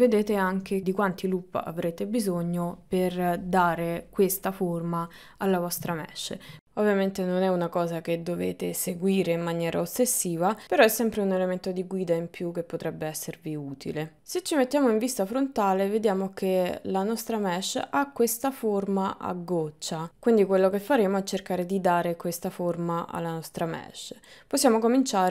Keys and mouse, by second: 6.5 ctrl+middle click, 15.6 KP_1, 17.2 ctrl+middle click, 21.3 Tab, 22.1 ctrl+middle click, 22.4 KP_1, 23.3 KP_3, 24.6 ctrl+middle click.